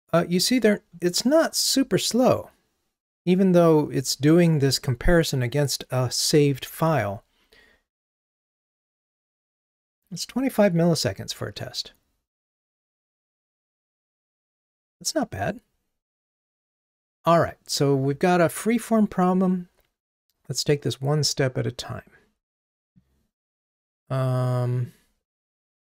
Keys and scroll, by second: 9.1 Right, 10.5 Left.